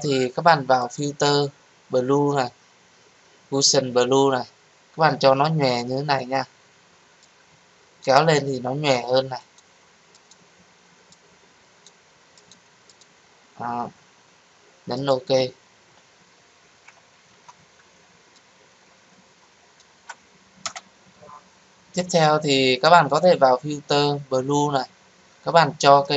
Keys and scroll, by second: 17.3 ctrl+t, 20.6 Return.